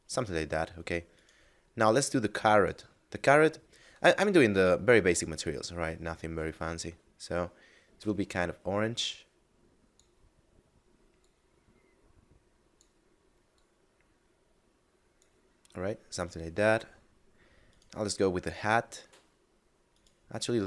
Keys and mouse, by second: 1.0 right click, 2.5 click, 11.1 click, 13.5 click, 16.9 middle click, 17.6 right click, 19.9 right click.